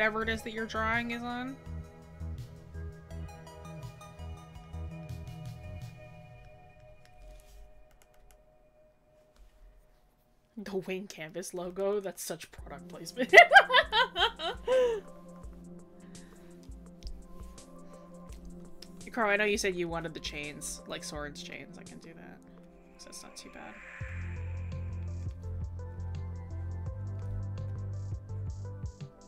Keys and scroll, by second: 19.3 scroll.